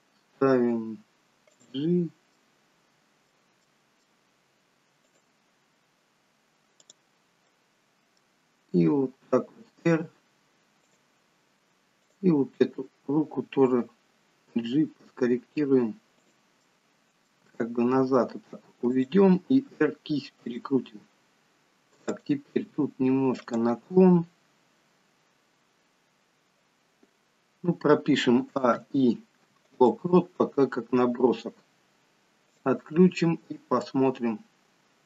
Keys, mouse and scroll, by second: 0.4 g, 2.4 middle click, 3.6 middle click, 5.0 click, 6.8 click, 7.5 middle click, 8.9 r, 12.6 click, 12.8 middle click, 14.6 g, 16.7 middle click, 17.5 g, 19.5 r, 22.2 click, 22.7 r, 24.6-25.3 scroll down 2, 28.5 a, 28.8 i, 32.5 click, 33.8 click.